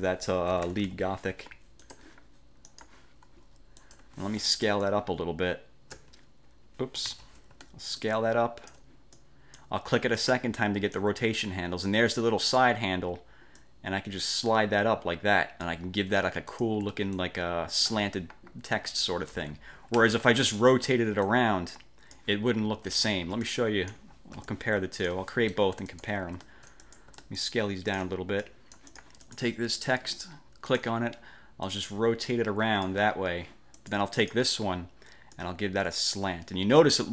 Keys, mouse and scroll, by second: 0.0 click, 0.4-1.5 typing, 2.0 click, 2.8 click, 4.0 click, 4.2 F1, 5.0-6.2 ctrl+shift+drag, 7.2 ctrl+z, 8.1-9.0 ctrl+shift+drag, 9.3-9.9 ctrl+shift+drag, 10.3 click, 13.7-16.0 drag, 16.6 click, 17.2-18.1 ctrl+shift+drag, 19.4 ctrl+z, 20.6 ctrl+z, 20.6 ctrl+click, 21.4-22.4 drag, 23.0 ctrl+z, 23.5-24.2 ctrl+drag, 24.4 ctrl+d, 24.6 ctrl+click, 25.4 ctrl+middle click, 26.0 ctrl+shift+click, 26.9 ctrl+shift+click, 27.5-28.3 ctrl+shift+drag, 28.6-29.6 ctrl+shift+drag, 30.8 click, 31.8-33.2 drag, 33.9 click, 35.4-37.1 drag.